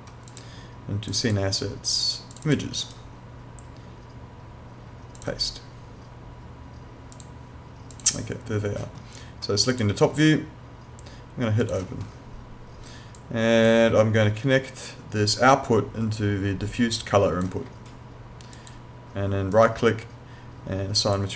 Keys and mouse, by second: 2.8 right click, 5.2 click, 18.5 click, 19.5 right click, 21.0 click.